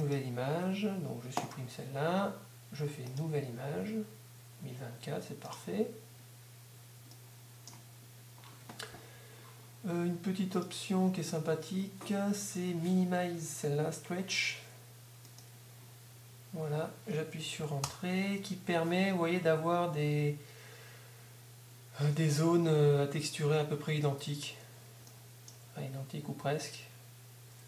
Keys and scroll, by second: 17.8 Return.